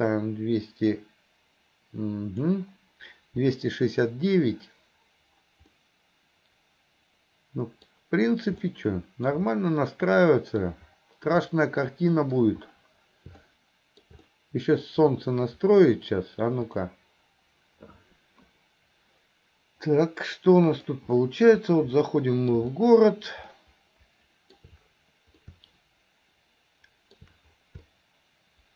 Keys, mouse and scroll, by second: 17.0 click, 20.0-21.1 middle drag, 22.1-22.7 middle drag, 22.8-23.5 shift+middle drag, 23.6-24.8 shift+middle drag, 25.6-27.4 shift+middle drag, 28.0-28.7 shift+middle drag.